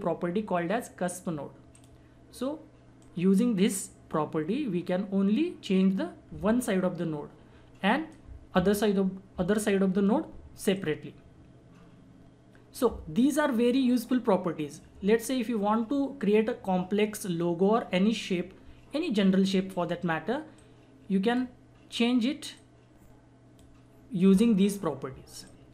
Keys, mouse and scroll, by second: 1.7-10.7 drag, 10.7-20.6 drag, 20.6-25.7 drag.